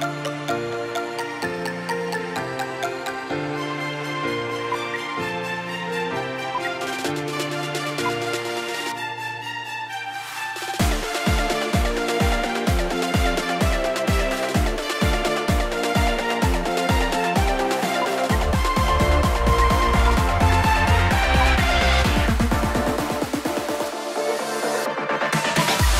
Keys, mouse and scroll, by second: 6.5 ctrl+r, 7.9 ctrl+r, 14.6 double click, 19.5 typing, 20.0 ctrl+r, 21.5 ctrl+r.